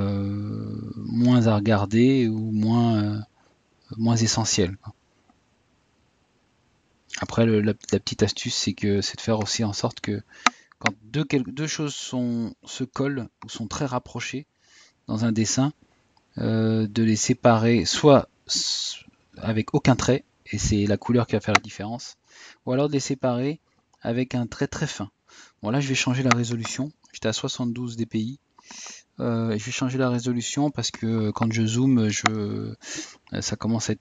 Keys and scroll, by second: 5.3 Tab, 8.3 typing, 16.8 typing, 28.9 typing.